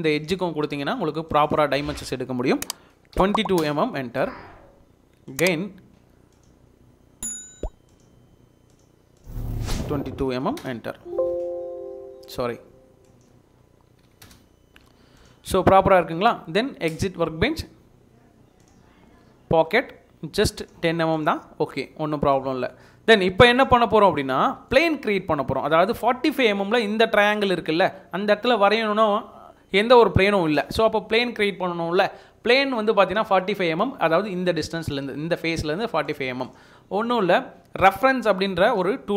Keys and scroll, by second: 3.2 typing, 3.6 Return, 10.2 typing, 10.6 Return, 13.9 typing, 14.2 Return.